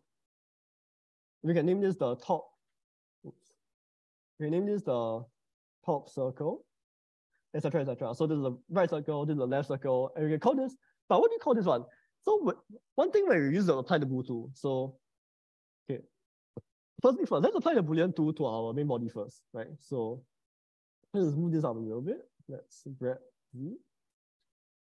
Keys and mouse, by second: 0.0 click, 1.5 shift+t, 1.7 o, 1.7 p, 2.1 space, 4.4 click, 4.7-6.6 drag, 7.8 click, 9.3 click, 14.9 s, 15.6 Escape, 20.6 g, 21.6 y, 22.1 Escape, 22.8 g, 23.3 z.